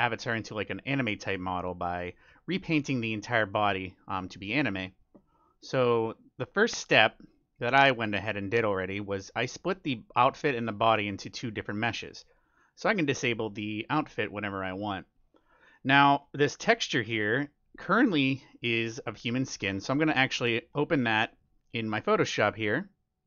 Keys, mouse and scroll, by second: 0.6-2.5 middle drag, 4.2-6.0 middle drag, 7.0-8.8 drag, 13.9-15.6 drag, 15.7-19.0 middle drag, 16.8-18.5 right drag, 19.0 middle click, 19.4-21.9 middle drag.